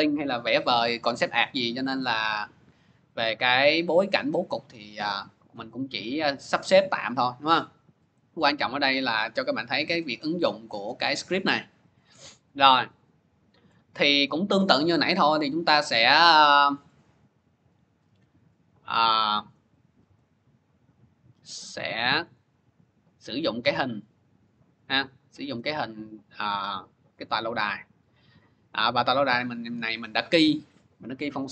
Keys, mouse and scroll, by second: 11.0 click, 11.8 click, 12.9 click, 14.9 click, 15.1 click, 16.6 click, 16.8 click, 17.4 click, 17.7 click, 18.8-20.1 scroll, 22.1 click, 23.3 click, 23.4 click, 24.6 click, 24.8 click, 25.5 scroll, 25.6 middle click, 27.1 click, 28.6 click, 29.4 click.